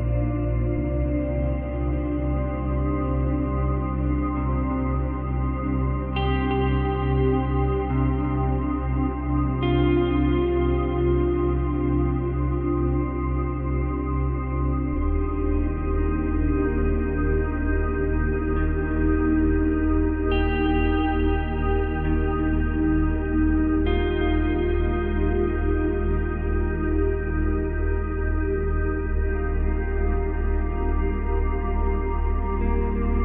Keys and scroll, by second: 23.8 Delete.